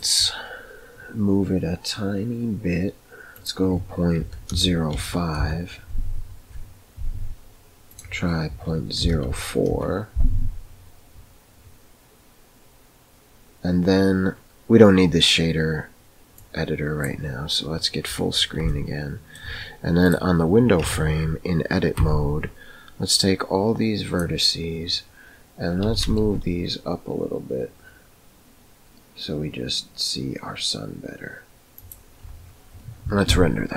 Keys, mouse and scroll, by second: 3.3-7.1 drag, 8.0-11.6 drag, 16.3-17.3 drag, 18.8-19.5 shift+middle drag, 20.9 Tab, 22.1 1, 23.2-24.3 drag, 25.8 g.